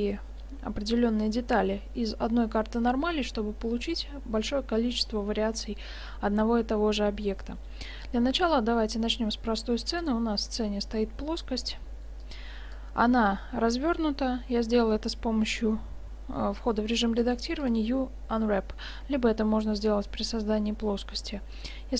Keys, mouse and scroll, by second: 9.1-10.0 middle drag, 10.5-11.9 right drag, 12.3-13.9 drag, 13.4 Tab, 14.9-16.6 middle drag, 17.1 u, 18.9 Tab, 21.6-21.9 drag.